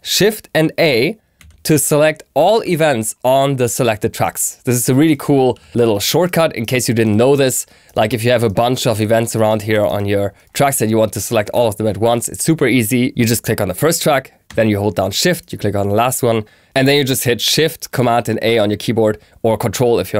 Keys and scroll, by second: 1.3 shift+super+a.